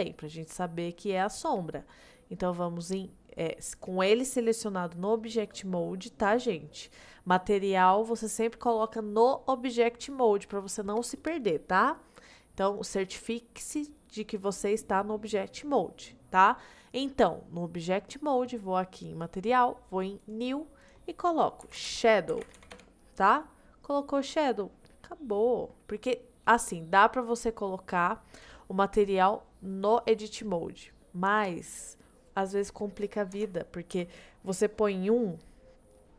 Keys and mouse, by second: 0.2-0.9 middle drag, 20.2 click, 20.9-22.8 drag, 26.5 click, 27.6-28.0 middle drag, 33.4 Tab, 34.0 a, 34.6 middle click, 36.0 middle click.